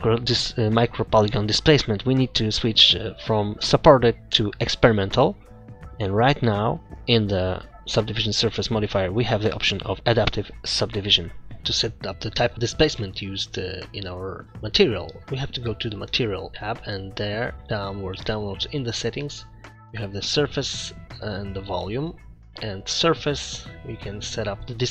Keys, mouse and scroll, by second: 4.3 click, 7.3 click, 16.4 click, 17.5 scroll up 1, 17.5 scroll down 10, 19.9 click, 21.1 click, 22.1-22.9 scroll down 3, 22.9 click, 23.3-24.9 scroll down 4.